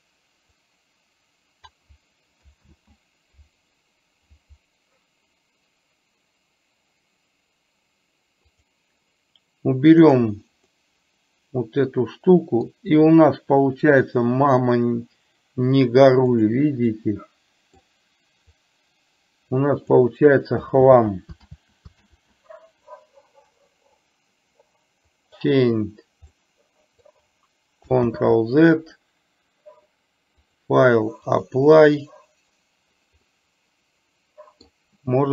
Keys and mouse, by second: 0.6 click, 0.8-1.8 drag, 8.6 click, 10.2 drag, 10.8-12.8 middle drag, 16.4 click, 17.1-17.8 middle drag, 18.8-19.9 drag, 20.9 ctrl+z, 25.1 click, 26.4-27.1 middle drag, 28.2 ctrl+z, 30.6-31.6 drag, 33.4-34.8 middle drag.